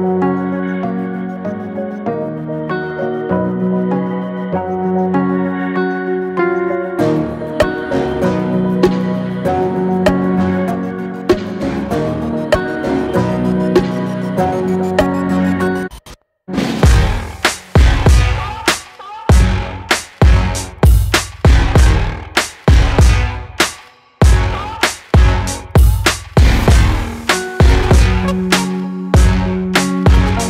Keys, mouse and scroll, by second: 0.9 click, 1.3-1.8 middle drag, 1.8 scroll down 1, 2.5 g, 4.7-5.8 middle drag, 5.8 click, 6.3 click, 6.6 Tab, 7.5 ctrl+r, 9.2 middle click, 9.8 scroll up 1, 10.3 g, 12.0 click, 12.6 alt+click, 13.5 alt+e, 16.4-17.2 drag, 17.2 scroll down 2, 17.5 Tab, 17.9 middle click, 18.3 click, 18.9 click, 19.2-20.3 right drag, 20.3 scroll up 4, 20.6-21.4 shift+middle drag, 21.4 click, 21.9-22.3 middle drag, 22.3 click, 22.6 Tab, 23.0 Tab, 23.2 click, 23.3 Tab, 23.7 click, 24.5 e, 26.3 alt+click, 27.2 click, 28.8 alt+click, 29.8 s.